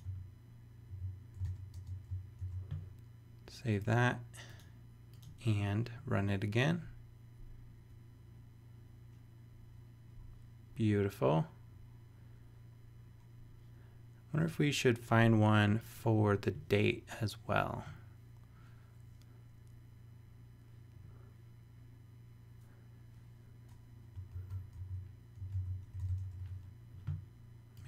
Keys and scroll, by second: 1.4 super+v, 1.7 super+space, 2.4 super+s, 24.3 super+f, 24.8 super+c, 25.1-26.8 typing.